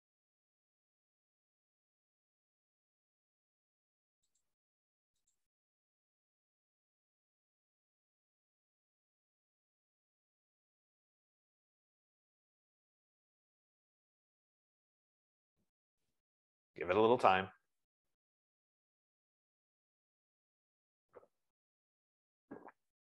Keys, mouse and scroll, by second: 4.8 click, 5.9 click.